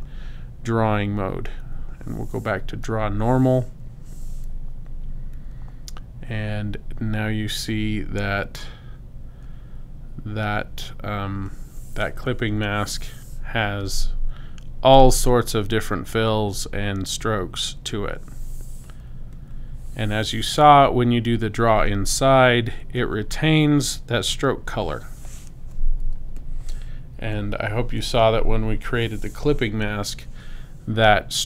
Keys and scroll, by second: 26.1 space.